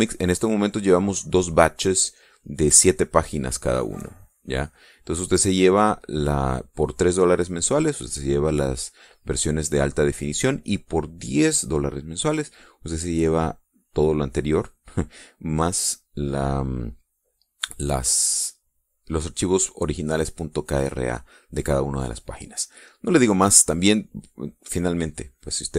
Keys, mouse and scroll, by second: 0.2 click, 1.2 click, 2.8-4.4 drag, 4.8 click, 5.6 middle click, 6.4 middle click, 9.5 middle click, 17.6-18.8 middle drag, 22.6 middle click, 22.9 click, 24.2 click.